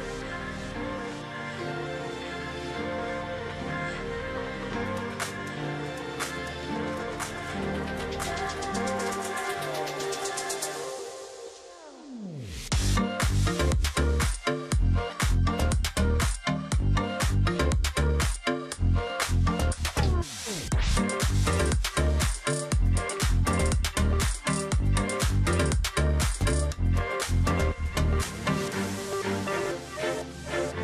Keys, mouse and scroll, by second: 0.6-1.1 alt+scroll down 1, 1.8-2.3 alt+scroll up 1, 3.1 alt+scroll down 1, 3.3-3.8 alt+scroll up 1, 4.2 double click, 4.9-5.4 alt+scroll up 1, 5.4 alt+scroll down 1, 7.0 space, 8.2 alt+scroll up 1, 10.6 ctrl+z, 11.3 shift+click, 11.6 space, 12.9 space, 14.3 ctrl+z, 15.4 space, 17.9 alt+click, 18.4 alt+scroll up 1, 19.8 ctrl+z, 21.9 alt+click, 24.3 ctrl+z, 24.8 shift+click, 26.0 shift+click, 26.3 ctrl+click.